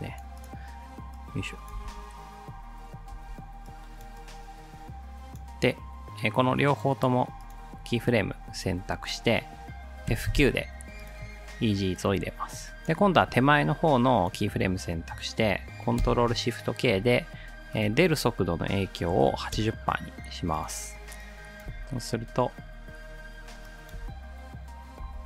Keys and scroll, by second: 1.8 space, 3.2 space, 10.1 F9, 16.0 ctrl+shift+k, 18.9-19.8 typing, 21.7 space, 23.9 space, 25.0 space.